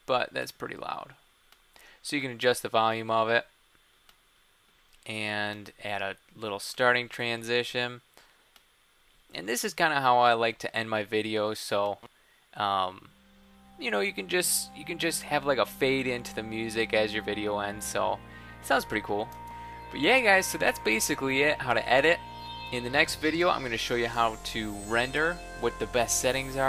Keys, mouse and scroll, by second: 19.4 super+x.